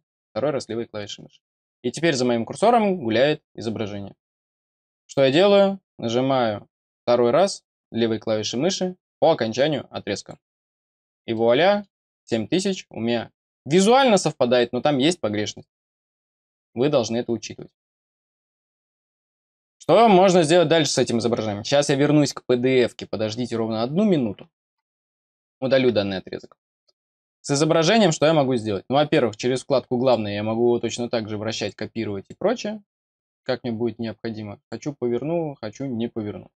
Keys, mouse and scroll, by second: 0.4-4.4 scroll down 6, 4.4-5.8 scroll up 1, 10.1 click, 11.2 middle click, 20.7 click, 27.1 click, 28.3-29.9 scroll down 1, 29.9 click, 31.5 click, 32.1 click, 33.4 scroll down 1, 34.5 click, 35.2 scroll up 1.